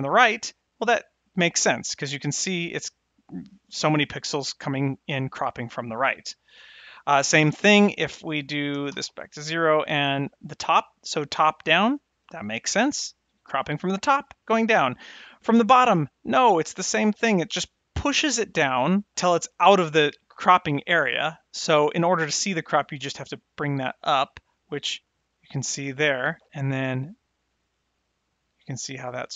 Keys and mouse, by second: 8.1-9.6 drag, 10.5-14.3 drag, 15.6-19.1 drag, 22.9-25.9 drag.